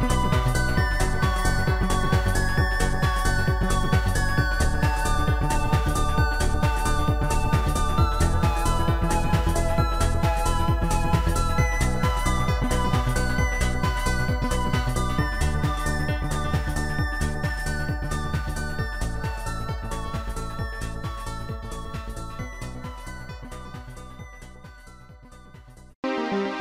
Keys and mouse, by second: 3.3 click, 4.4 click, 6.0 click, 6.6 click, 7.5 click, 9.9 Return, 9.9 click, 11.1 shift+click, 12.2 shift+click, 13.6 shift+click, 14.1 Return, 14.1 shift+click, 15.2 shift+click, 16.5 shift+click, 17.6 Return, 19.2 shift+click, 20.5 shift+click, 21.7 Return, 23.9 Return, 23.9 shift+click, 24.3 shift+click.